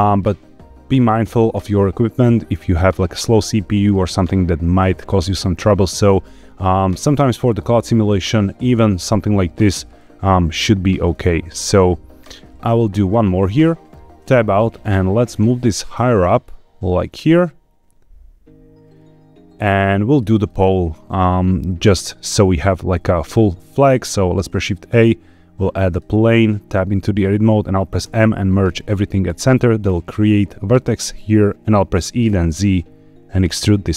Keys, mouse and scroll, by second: 8.7 ctrl+z, 11.1 shift+r, 12.2-13.0 right drag, 14.1 Tab, 14.5 scroll down 3, 15.2 g, 20.0 click, 20.4 shift+middle click, 21.0 shift+middle click, 21.6 scroll up 1, 24.2 shift+a, 26.7 Tab, 28.0 m, 32.0 e, 32.2 z.